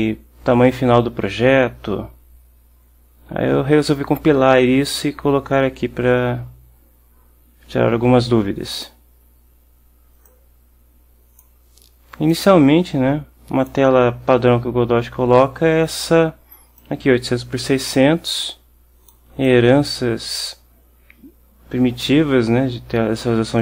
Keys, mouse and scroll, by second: 8.8 click, 10.4-11.7 drag, 12.4-14.0 drag, 16.9-19.4 drag, 19.6 click.